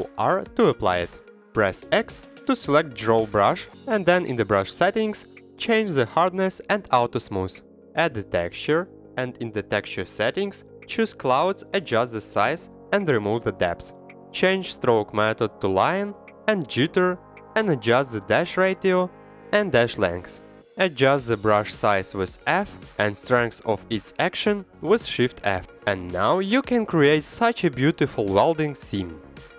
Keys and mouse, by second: 1.7 click, 2.0 ctrl+r, 2.5 click, 4.3 x, 5.7-9.8 drag, 10.1 click, 11.1 click, 11.4 middle click, 11.7-12.0 drag, 12.8 click, 13.7 click, 14.6 click, 16.7-25.0 drag, 25.0 ctrl+Tab, 25.1 middle click, 25.3 shift+middle click, 25.8 middle click, 26.6 middle click, 27.1 shift+middle click, 27.5 middle click, 28.0 f, 29.0 shift+f.